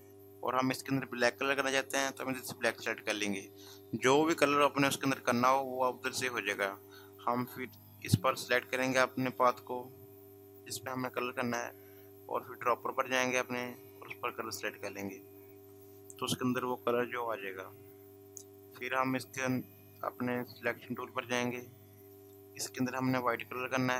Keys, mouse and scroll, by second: 7.7 v, 10.8 click, 19.6 v, 21.5 click.